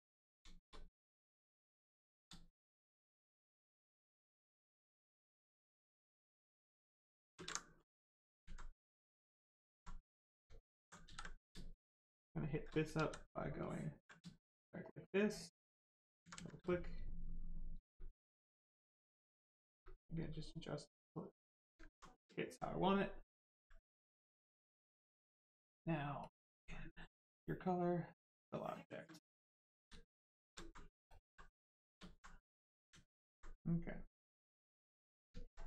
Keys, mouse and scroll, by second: 0.6 shift+right click, 1.0 ctrl+click, 4.7 space, 6.8 space, 9.6 right click, 10.5 alt+right click, 10.8 ctrl+right click, 11.0 ctrl+z, 12.9 ctrl+z, 13.6 ctrl+click, 14.1 shift+click, 18.7 space, 20.8 space, 21.8 alt+right click, 23.0 ctrl+right click, 23.5 right click, 26.2 click, 29.3 right click, 30.6 alt+right click, 30.7 right click, 31.1 ctrl+click, 31.4 right click, 31.7 shift+right click, 32.0 alt+right click, 32.6 right click, 32.7 right click, 34.3 shift+right click, 34.9 shift+click, 35.4 alt+right click.